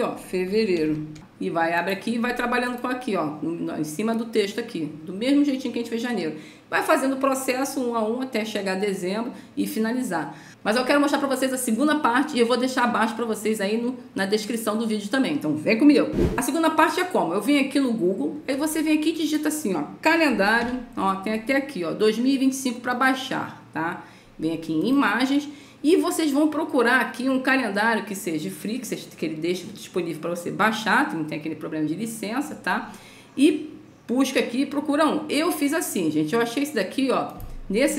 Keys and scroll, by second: 0.4 Caps_Lock, 0.7 f, 0.8 Caps_Lock, 1.1 e, 1.1 space, 20.6 a.